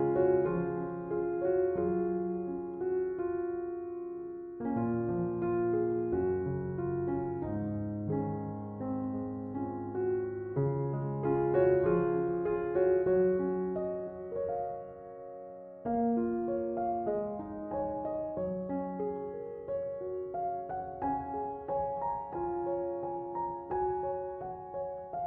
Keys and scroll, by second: 4.3 8, 4.5 Return.